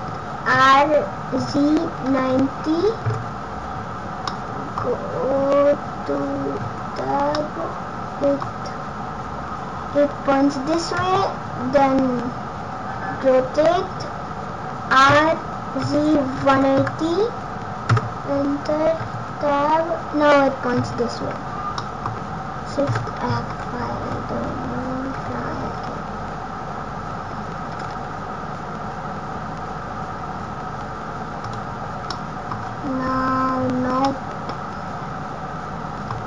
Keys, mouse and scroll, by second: 0.5 r, 4.2 middle click, 4.8 scroll up 1, 5.6-6.1 scroll up 1, 6.1-6.4 scroll down 1, 6.7 Tab, 7.3 middle click, 8.7-9.1 scroll up 1, 11.6 scroll down 1, 12.1 scroll up 1, 12.9 scroll down 1, 15.0 r, 18.9 Tab, 19.4-19.8 scroll up 1, 21.1 scroll down 2, 21.6 scroll down 1, 21.7 middle click, 22.8 shift+f, 31.9 scroll up 2, 32.0 middle click, 32.5-33.4 scroll down 9, 33.2-33.6 scroll up 8, 34.1 middle click.